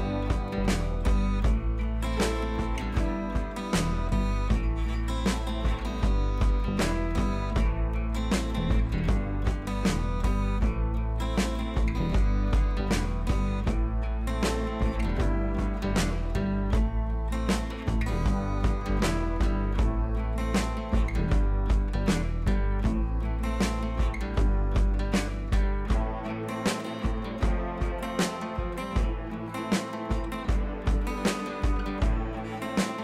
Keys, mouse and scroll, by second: 0.3 click, 1.3 ctrl+e, 1.6-2.1 click, 2.3 scroll down 1, 3.0 ctrl+t, 3.3-4.3 drag, 4.5-5.1 drag, 8.4-8.8 scroll up 1, 9.0 click, 9.1 Left, 10.5 scroll down 1, 10.8 click, 11.0 scroll down 1, 11.8 click, 12.1-12.7 scroll up 1, 13.7 scroll down 1, 17.2-17.9 drag, 20.9-22.7 drag, 22.9 ctrl+c, 23.4 click, 23.7 scroll up 1, 23.9 t, 24.2 click, 24.9 ctrl+v, 25.8-26.7 click.